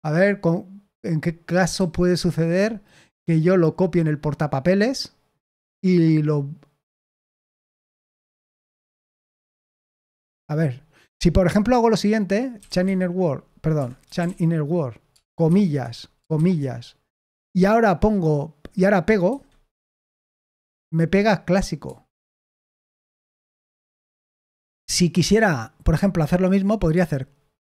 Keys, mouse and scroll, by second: 1.7-2.7 typing, 12.3-14.7 typing, 13.7 Escape, 19.2 Escape, 20.0 p, 21.8 u, 24.7 u.